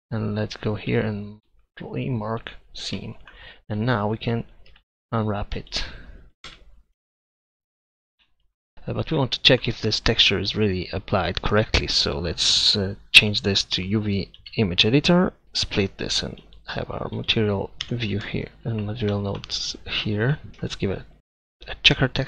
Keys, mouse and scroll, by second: 1.4 ctrl+e, 3.4 a, 3.8 a, 4.7 u, 6.5 Tab, 7.6 Tab, 9.4 middle click, 13.2-14.7 drag, 15.5 Tab, 20.5 Tab, 20.6 shift+a.